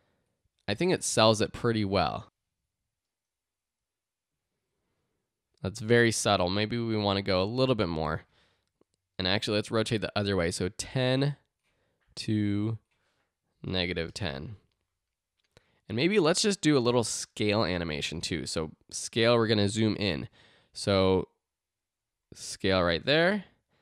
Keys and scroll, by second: 0.8 space, 6.1 space, 9.1-10.0 typing, 13.3-14.4 typing, 18.0 s.